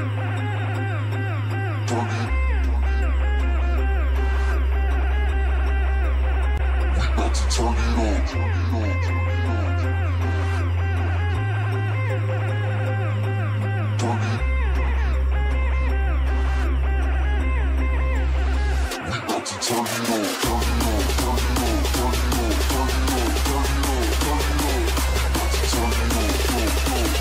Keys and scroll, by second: 3.3 shift+\, 20.2 ctrl+space.